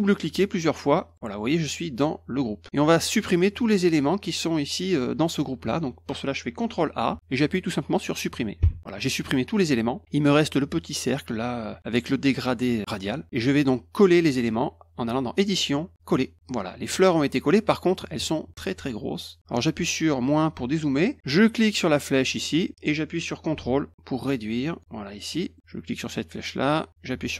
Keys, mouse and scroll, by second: 1.1 click, 15.3 click, 16.0 click, 22.2-24.8 drag, 25.2 middle click, 25.5 middle click, 26.5-27.3 drag.